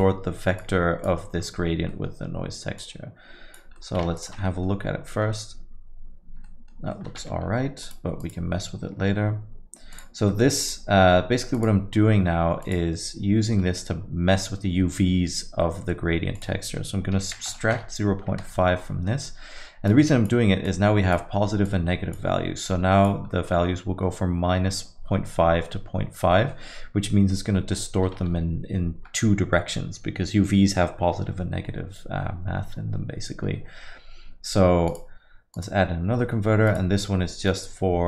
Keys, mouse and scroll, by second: 0.9 click, 1.4-1.9 scroll up 3, 1.9 middle click, 2.8 click, 3.8 middle click, 4.5 ctrl+shift+click, 4.9-5.9 scroll up 2, 5.1 middle click, 6.4 middle click, 7.0 middle click, 7.2 shift+a, 11.6 click, 16.3 click, 18.4 scroll up 1, 18.6 middle click, 18.6-19.4 scroll down 5, 19.1 middle click, 19.9 click, 20.7 click, 21.7 click, 23.3 click, 23.3 middle click, 23.7-25.7 scroll up 2, 25.7-26.3 scroll up 1, 26.3 middle click, 27.1 middle click, 27.7 middle click, 28.2 shift+a, 36.0 scroll up 1, 36.2 middle click, 36.7 click.